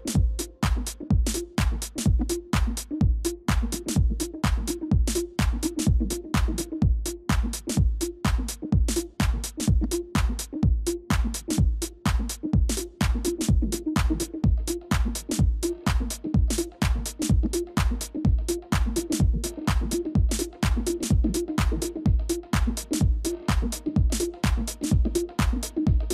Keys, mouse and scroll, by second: 0.2 double click, 1.5-3.1 typing, 4.6-6.7 typing, 8.9-12.1 typing, 14.5 ctrl++, 14.6 ctrl++, 15.0-15.7 ctrl+scroll up 1, 18.6 ctrl+y, 24.0 shift+click.